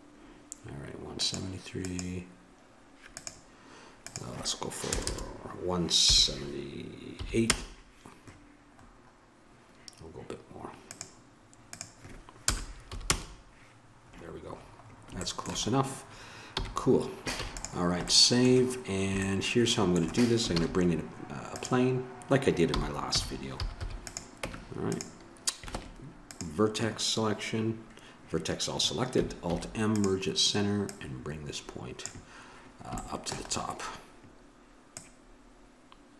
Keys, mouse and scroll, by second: 5.1 BackSpace, 8.8-10.9 middle drag, 10.9-13.1 drag, 14.6 middle click, 16.5 n, 17.3 ctrl+s, 20.5 shift+a, 22.7 r, 24.4 Tab, 25.8 ctrl+Tab, 29.5 alt+m, 30.8-33.3 drag, 33.3 middle click, 34.9 right click, 35.4-36.1 drag.